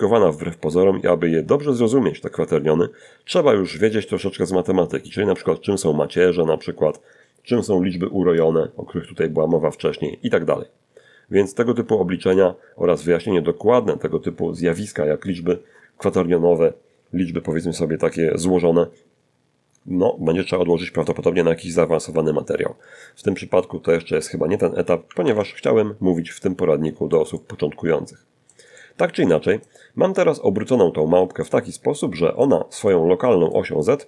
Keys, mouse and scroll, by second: 0.5-1.1 scroll down 1, 1.1-2.9 drag, 6.6-10.7 drag, 23.4 ctrl+w, 24.5-25.5 middle drag, 25.7 scroll down 2, 26.9-28.0 middle drag, 29.6-30.8 middle drag, 31.0 middle click.